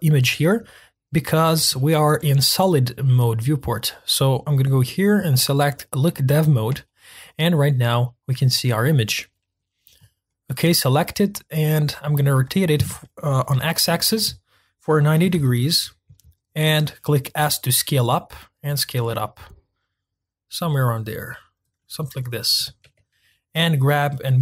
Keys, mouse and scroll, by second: 5.8 click, 6.8-7.4 shift+middle drag, 7.4-7.8 scroll up 4, 7.8-10.0 middle drag, 10.0 click, 10.2-12.4 middle drag, 12.4 r, 17.3 s, 21.8-22.6 middle drag, 22.6 g.